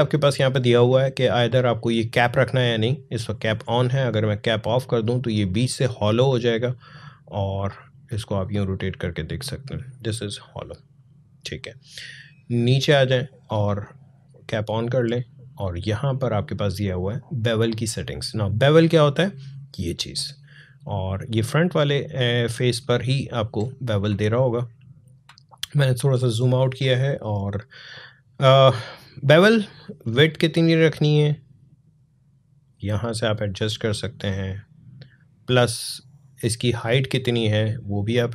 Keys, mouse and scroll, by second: 3.6 click, 6.8-12.3 drag, 14.5-22.9 drag, 22.9-23.4 alt+scroll down 1, 23.4-23.9 scroll down 1, 24.2 click, 24.4 space, 29.8-34.3 drag, 34.3-38.3 drag.